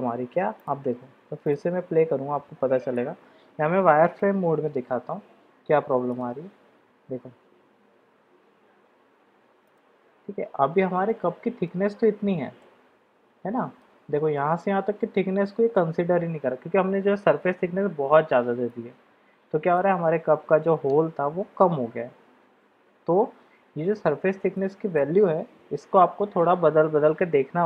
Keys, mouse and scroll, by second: 0.8-2.9 drag, 2.9-4.4 middle drag, 4.9 shift+z, 6.1 click, 9.8-11.0 middle drag, 11.1-11.7 middle drag, 12.6-13.8 middle drag, 18.6-19.7 middle drag, 24.5-25.0 middle drag, 25.9 shift+z.